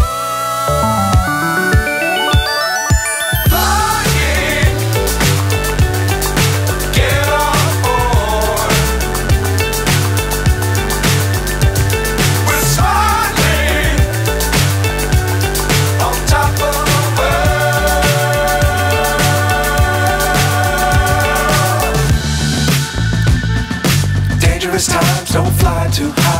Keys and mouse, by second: 10.9-14.1 drag, 18.0 click, 19.8 click, 24.8 click.